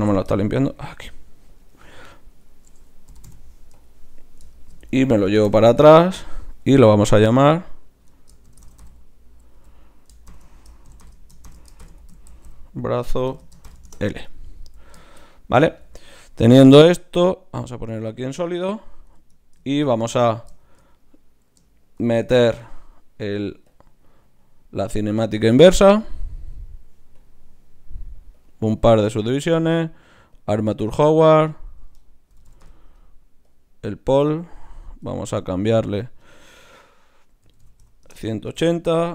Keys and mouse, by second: 2.5-4.5 drag, 3.2 g, 4.5 middle click, 5.3 g, 7.2-11.5 drag, 12.3 a, 14.6 z, 15.7 z, 16.9-18.7 drag, 18.7 middle click, 19.2 Tab, 20.3-22.0 right drag, 22.0 ctrl+shift+c, 22.1 right click, 24.4-27.0 right drag, 26.0-33.2 drag, 34.6-36.3 right drag, 35.8-38.1 drag.